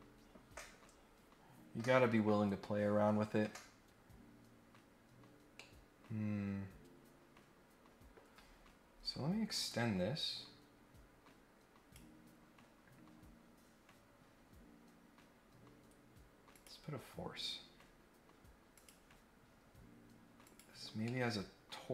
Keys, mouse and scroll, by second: 4.8 scroll down 2, 5.5-8.1 middle drag, 8.8 scroll up 1, 9.6-11.9 drag, 16.5 click, 18.7 click, 20.4 click, 21.0 middle click.